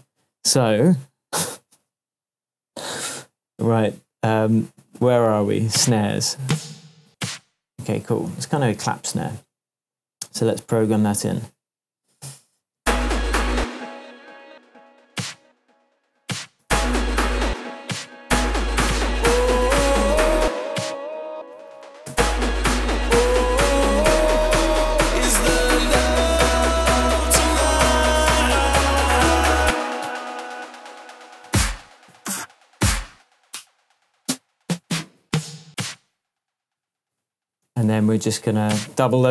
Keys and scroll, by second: 12.2 shift+super+m, 12.8 shift+super+space, 13.5 super+space, 14.5 space, 16.6 space, 20.4 space, 21.3 super+space, 21.4 super+d, 22.1 super+space, 23.1 space, 27.4 super+d, 29.6 space, 30.6 shift+Tab, 32.1 Up, 32.6 Down, 34.5 Up.